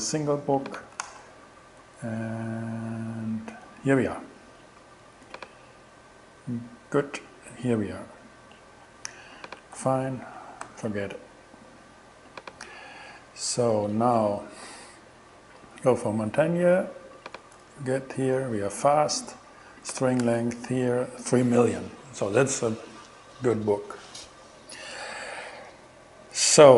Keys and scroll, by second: 1.1 shift+Return, 9.8 super+w, 10.7 super+d, 17.7 shift+Return, 20.3 shift+Return.